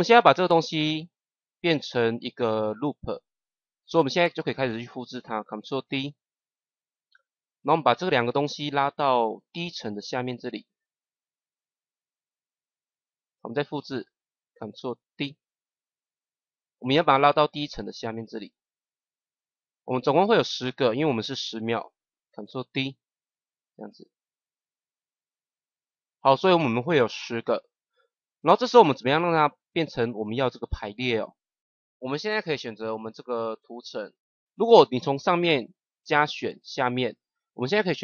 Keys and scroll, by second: 5.7 ctrl+d, 15.1 ctrl+d, 22.4 ctrl+d.